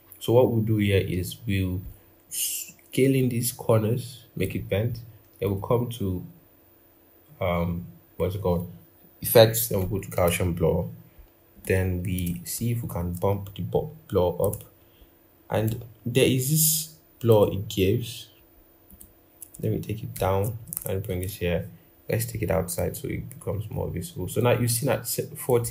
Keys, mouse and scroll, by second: 19.9 ctrl+[, 20.8 shift+click, 21.3-24.0 scroll, 24.0-25.7 scroll up 1.